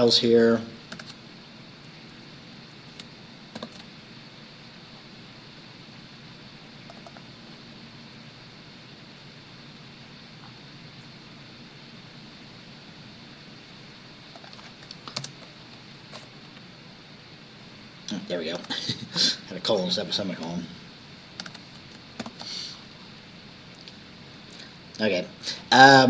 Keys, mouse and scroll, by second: 1.0 ctrl+s, 3.6 ctrl+shift+b, 7.0 click, 14.4 click, 15.3 BackSpace, 15.8 ;, 16.5 Down, 18.6 ctrl+s, 21.5 ctrl+s, 22.3 ctrl+shift+b.